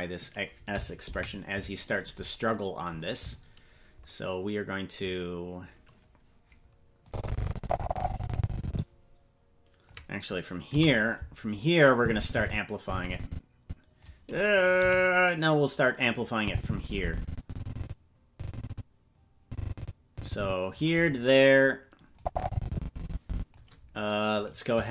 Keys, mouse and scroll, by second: 1.0 KP_Decimal, 1.9-2.2 scroll down 4, 7.0-9.9 drag, 10.6 i, 11.9-14.0 drag, 14.5 right click, 14.8 g, 16.4-20.7 drag, 22.1-23.5 drag, 24.5 right click.